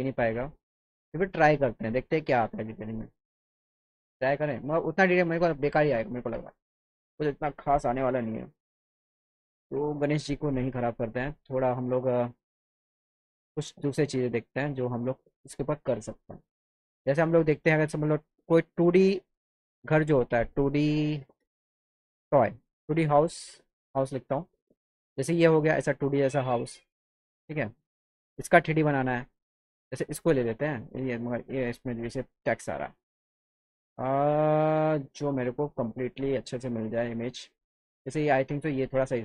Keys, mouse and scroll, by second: 13.0 click, 16.4 click, 17.0 click, 21.5 f, 22.6 click, 23.5 click, 27.1 click, 29.9 click, 32.4 click, 35.3 click, 37.2 right click.